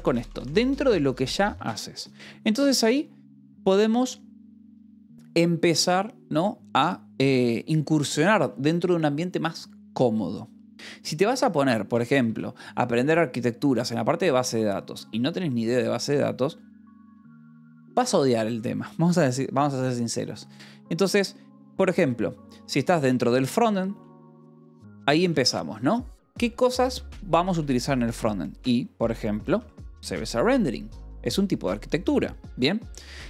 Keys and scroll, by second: 0.0-0.3 typing, 1.4 Escape, 11.3 o, 12.0 =, 12.3 space, 22.5-25.4 typing, 26.6 BackSpace, 27.3 -, 27.5 space, 30.0 space.